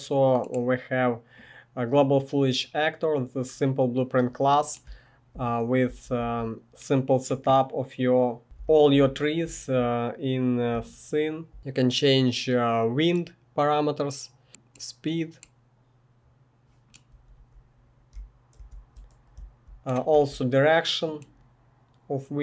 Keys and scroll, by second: 4.8 typing, 5.9-6.2 typing, 8.2-11.6 typing, 17.1-19.4 typing, 21.0 typing.